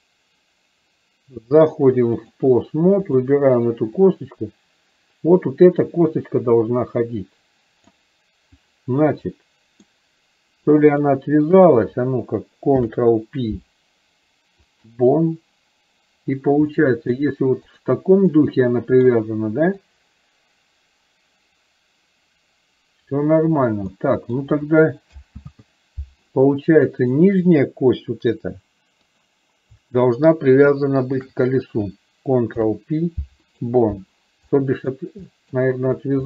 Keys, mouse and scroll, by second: 1.6 click, 3.1 click, 4.0-8.0 drag, 9.4-9.9 middle drag, 11.1 shift+click, 16.8-17.1 middle drag, 18.3-19.1 middle drag, 20.0-23.3 drag, 24.0-24.4 middle drag, 27.0 shift+middle click, 31.1 shift+click, 34.6 middle click, 35.4 middle drag.